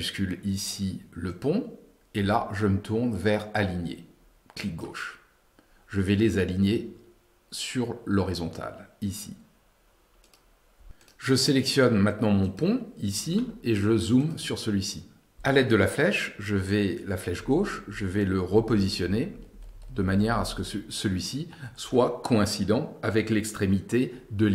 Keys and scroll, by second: 17.7 Left.